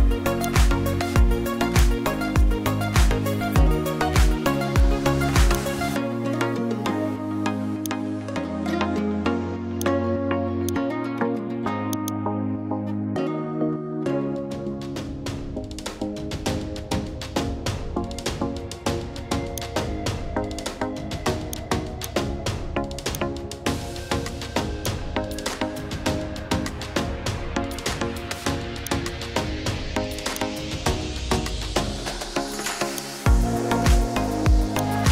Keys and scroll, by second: 13.1-18.6 typing.